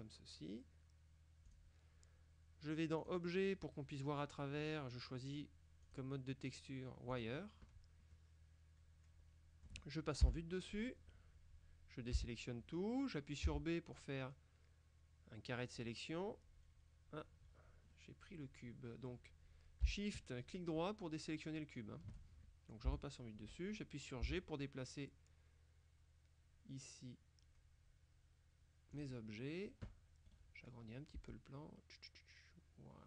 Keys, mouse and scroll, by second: 1.5 click, 3.1 click, 4.7-5.9 scroll down 1, 5.9 click, 7.2 click, 8.2-10.2 drag, 10.3 KP_7, 11.1-11.5 scroll down 1, 12.2 a, 13.5 b, 14.0-16.3 drag, 18.0-19.6 drag, 20.9 shift+click, 23.0 KP_7, 24.3 g, 29.0 click, 30.3 right click, 31.2 s.